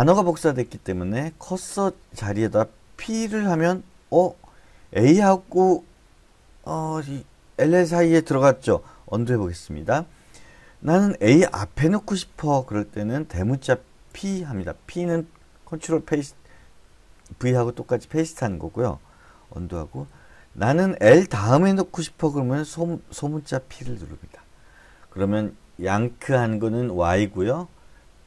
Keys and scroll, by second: 0.0-3.1 typing, 9.2 u, 14.1 shift+p, 19.7-20.5 typing, 23.7 p.